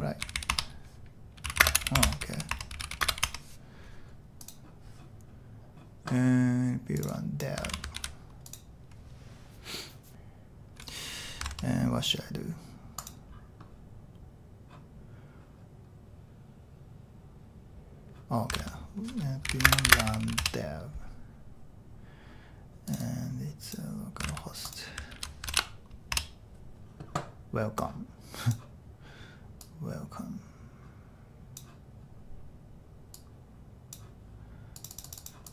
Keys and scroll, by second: 0.3-3.6 typing, 0.5 Return, 7.7 super+c, 8.0 super+h, 10.1 Return, 11.5 super+Tab, 18.6 super+Tab, 19.2-20.9 typing, 25.2 super+t, 25.5 super+v, 26.1 Return.